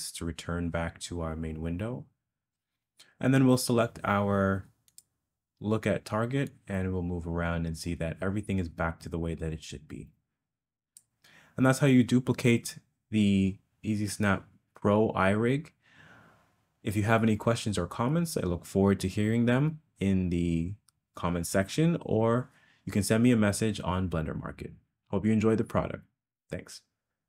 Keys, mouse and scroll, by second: 0.0 ctrl+space, 6.5 click.